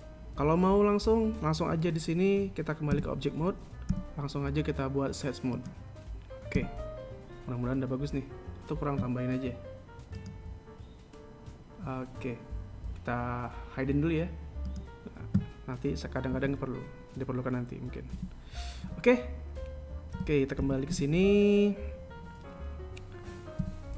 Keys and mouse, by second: 3.8 Tab, 4.7 w, 7.4 Tab, 11.0-14.0 drag, 15.5 click, 17.2 z, 19.0 z, 19.7 KP_1, 21.0 Tab, 21.5 Tab, 21.7 z.